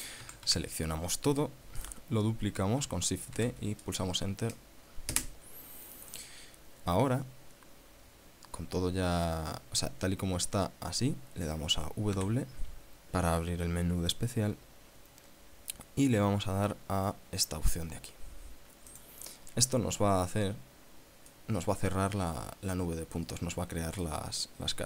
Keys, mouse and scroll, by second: 0.8 a, 4.0 shift+d, 5.7 KP_Enter, 12.7 w, 19.5 click, 20.8 scroll up 1, 21.9-24.8 middle drag.